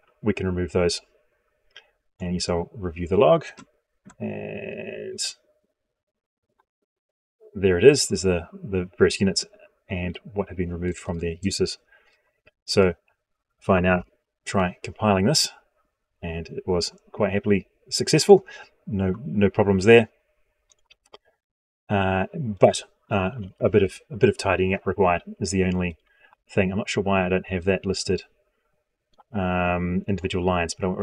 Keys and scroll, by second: 13.6 ctrl+F9.